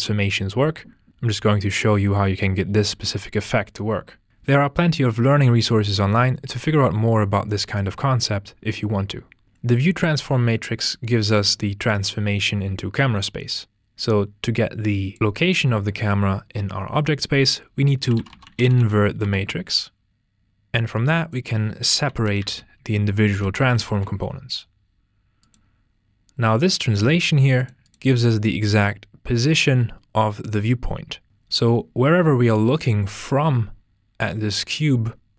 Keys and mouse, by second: 10.3 drag, 14.0 click, 20.3 click, 21.3 drag, 25.4 click, 27.2 g, 27.6 click, 27.8 drag, 31.3 ctrl+space.